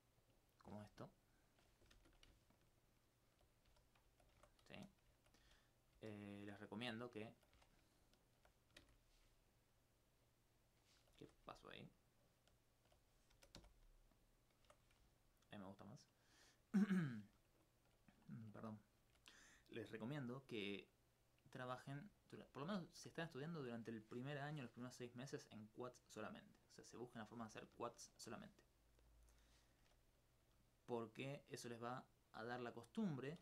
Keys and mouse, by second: 1.0 alt+click, 1.5 alt+click, 2.0 shift+space, 4.4 alt+Tab, 4.8 alt+z, 5.5 alt+z, 5.9 alt+z, 6.4 alt+z, 7.1 alt+click, 7.5 alt+click, 8.8 shift+space, 9.6-10.9 middle drag, 11.2 alt+Tab, 11.7 alt+click, 12.5 alt+right click, 13.3 alt+g, 13.6 alt+x, 14.1 click, 14.6 Tab, 15.5 alt+click, 17.6 alt+click, 22.2 middle click, 22.5 alt+middle click, 23.3 middle click, 24.3 middle click, 26.0-27.1 drag, 27.1 click, 29.1 click, 30.1 z, 30.5 z, 31.0 z, 32.7 right click.